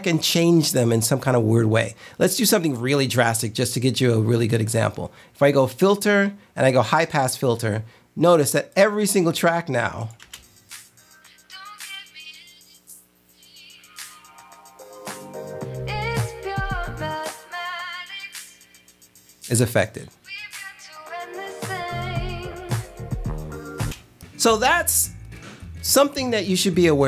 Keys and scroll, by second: 10.3 space, 23.9 space.